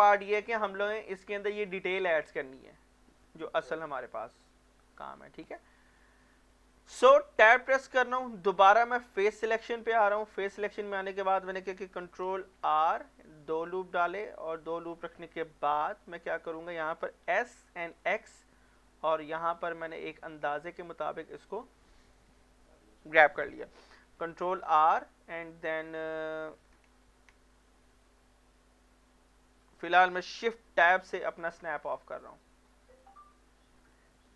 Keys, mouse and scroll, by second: 0.4 scroll down 1, 1.1 scroll up 1, 4.5 middle click, 5.2-5.6 scroll up 1, 5.6 middle click, 6.0 shift+middle click, 6.3 scroll up 1, 6.7 middle click, 7.4 Tab, 9.4 scroll down 1, 9.7 middle click, 10.0 click, 10.4 middle click, 10.8-11.7 scroll up 1, 12.1 ctrl+r, 13.2-13.7 scroll up 1, 13.7 click, 14.0 right click, 14.4 middle click, 16.5 shift+middle click, 17.3-18.0 typing, 21.5 click, 24.2 ctrl+r, 25.8 middle click, 27.2 ctrl+r, 27.9 click, 31.1 shift+Tab, 31.5 middle click, 32.2-34.2 drag.